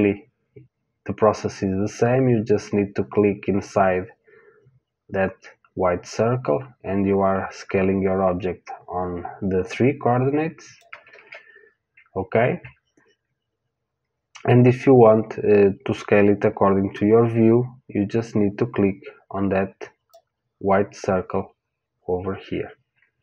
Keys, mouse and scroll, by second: 3.1 click, 11.1 ctrl+z, 16.2 click.